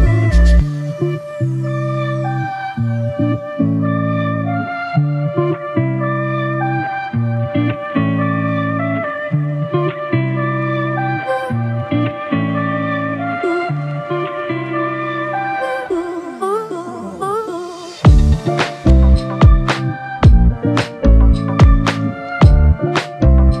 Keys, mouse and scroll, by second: 2.5 ctrl+alt+click, 18.8 alt+click.